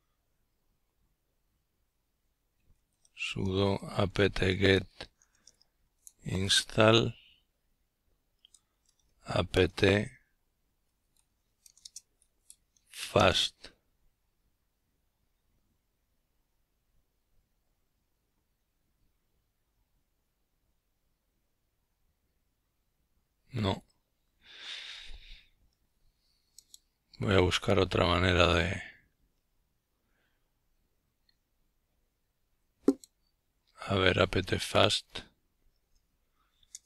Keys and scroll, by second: 0.0-1.4 typing, 22.6-29.6 typing.